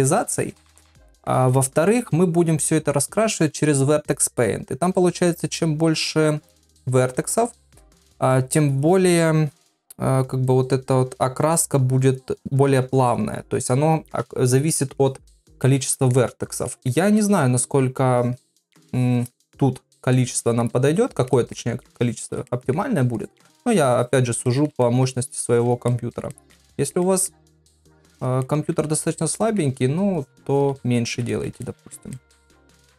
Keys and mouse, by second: 0.3 shift+click, 1.1 ctrl+middle click, 1.6 shift+middle click, 15.7 middle click, 16.7 ctrl+middle click, 17.2 middle click, 18.2 shift+click, 18.6 shift+click, 18.9 shift+click, 20.1 middle click, 20.9 shift+click, 21.3 middle click, 21.8 shift+click, 22.2 shift+click, 22.5 middle click, 23.2 shift+click, 23.8 shift+click, 24.0 shift+click, 24.5 shift+middle click, 24.8 middle click, 25.4 shift+click, 25.9 middle click, 26.3 shift+middle click, 26.7 ctrl+middle click, 27.0 middle click, 27.8 shift+click, 28.1 shift+click, 28.4 middle click, 29.0 shift+click, 29.4 middle click, 30.2 shift+click, 30.5 shift+click, 31.3 ctrl+middle click, 31.6 shift+middle click, 32.2 ctrl+middle click, 32.4 middle click.